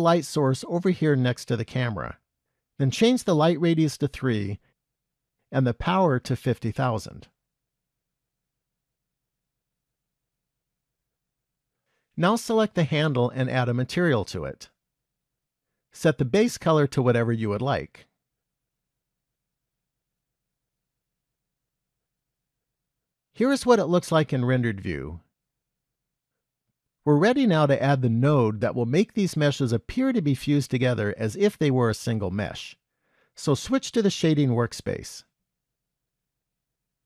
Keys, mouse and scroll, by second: 0.4 g, 3.2 click, 4.3 click, 6.8 click, 8.1 KP_0, 9.9 middle click, 11.3-12.5 scroll up 4, 12.5 click, 14.3 click, 15.3 click, 16.5 click, 18.8 click, 23.0 z.